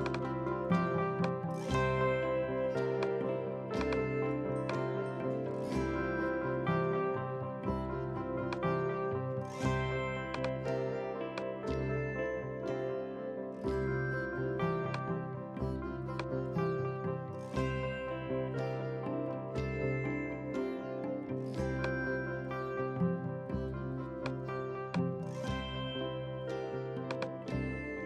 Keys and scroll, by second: 26.3 b.